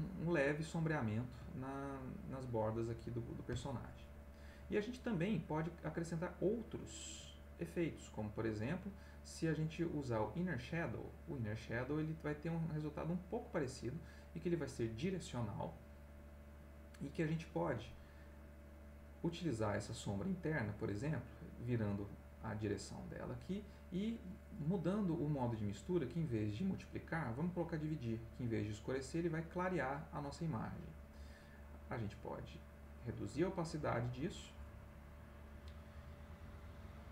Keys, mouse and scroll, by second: 0.9-5.5 scroll up 1, 10.3 click, 18.6-19.9 drag, 26.5-27.9 drag, 31.9-33.5 drag, 36.8-37.1 drag.